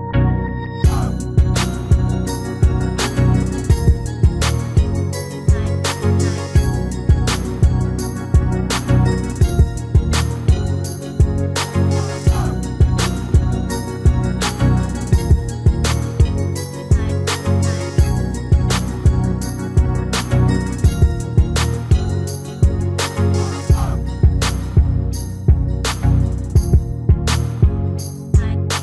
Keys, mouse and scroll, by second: 2.1 n, 5.5 a, 7.1 r, 11.2 g, 15.3 s, 21.3 g, 24.1-26.9 middle drag, 28.2 s.